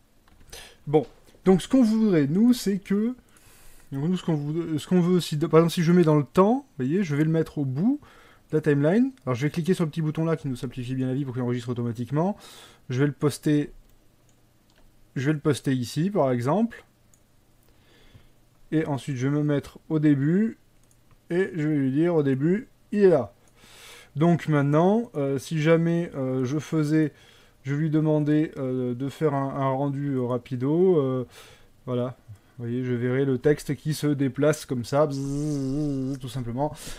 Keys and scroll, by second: 0.5 Escape.